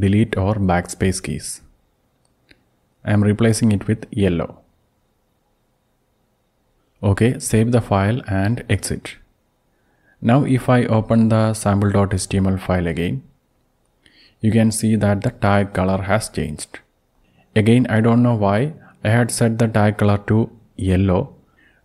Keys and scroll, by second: 0.0 BackSpace, 0.4 BackSpace, 1.7-3.2 typing, 7.4 ctrl+o, 7.8 Return, 9.0 ctrl+x, 11.4 Up, 11.8 Up, 12.2 Up, 13.2 Return, 21.7 alt+Down.